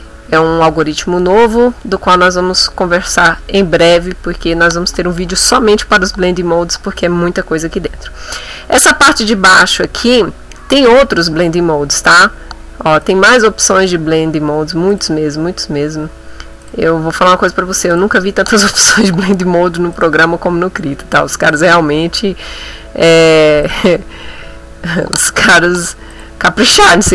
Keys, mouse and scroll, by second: 10.9 click, 13.0 click, 13.8-14.2 scroll down 1, 14.9 click, 15.4-16.0 scroll down 1, 16.6 click, 17.9 click, 18.6-19.2 scroll down 1, 20.0 click, 20.5-21.1 scroll down 1, 21.5 click, 22.0-22.3 scroll down 1, 22.7-23.2 scroll down 1, 23.6 click, 25.0-25.6 scroll down 1, 26.1 click, 26.6-27.1 scroll down 1.